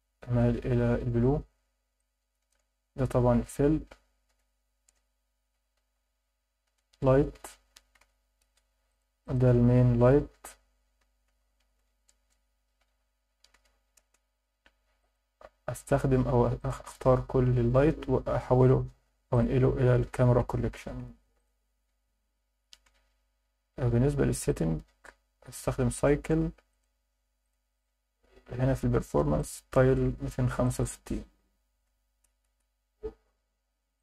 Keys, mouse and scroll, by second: 2.0-2.5 alt+middle drag, 3.3 F1, 3.3 F2, 5.9 l, 8.8 click, 9.2 click, 10.3 F2, 15.0 click, 15.8 shift+click, 16.6 shift+click, 18.3 m, 22.1-22.8 scroll up 1, 22.8 KP_0, 24.5 click, 26.7 click, 27.4 click, 29.3-33.8 drag.